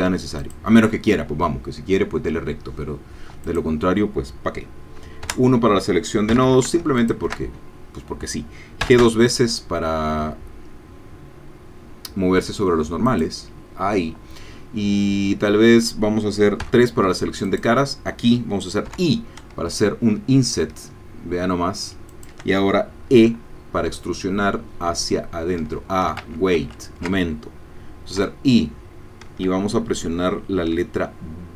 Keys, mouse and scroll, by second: 0.4 click, 3.4-5.2 drag, 5.2 1, 6.3 a, 7.0 alt+shift+click, 8.8 g, 13.1 click, 16.6 3, 17.4 click, 18.9 i, 22.1 shift+click, 23.2 e, 25.6 Escape, 26.2 ctrl+z, 28.2 i.